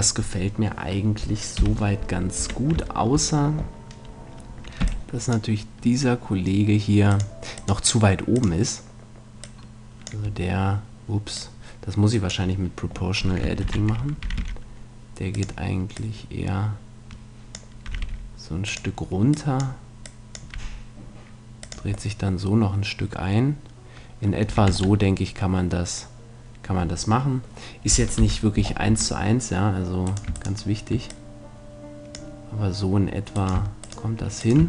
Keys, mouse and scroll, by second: 1.6 KP_3, 2.4 Tab, 3.0-4.9 middle drag, 4.9 b, 7.1-9.3 drag, 9.4-11.2 drag, 11.4-13.2 drag, 13.6 ctrl+z, 14.2 r, 16.0-17.7 drag, 17.8 r, 18.8-22.0 drag, 20.6 r, 22.2 middle click, 24.5 a, 24.7 Tab, 25.0-27.0 middle drag, 28.2 KP_3, 28.6-30.1 middle drag, 28.9 Tab, 30.1-31.4 drag, 31.1 right click, 32.1-33.4 drag.